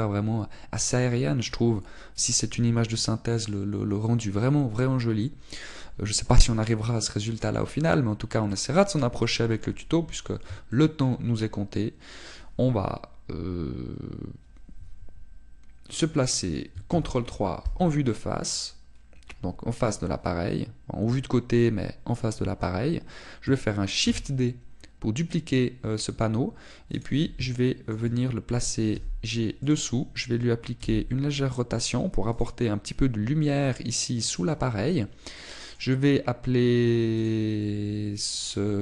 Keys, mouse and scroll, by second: 8.2 middle click, 8.9-9.4 scroll down 4, 9.4 middle click, 11.6 shift+middle click, 12.2-12.6 scroll up 2, 17.8 ctrl+KP_3, 25.0 shift+d, 28.0 click, 28.4 shift+middle click, 29.8 g, 30.6 click, 31.7 r, 33.4 click, 36.2 middle click, 38.2 click.